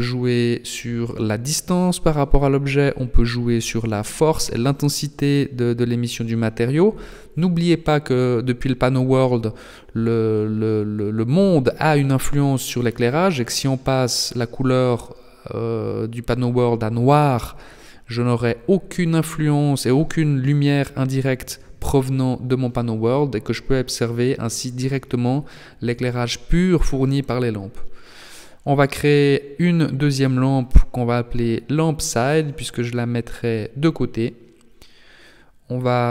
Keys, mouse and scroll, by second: 2.0-2.4 scroll up 2, 2.4 shift+middle click, 2.4 scroll down 1, 2.4 g, 5.8 click, 7.2 click, 7.8 click, 19.2 click, 20.4 click, 21.9 click, 22.6-23.1 scroll down 1, 23.1 middle click, 24.9 shift+a, 27.8 click, 28.2 click, 32.6 KP_3, 34.9 KP_3.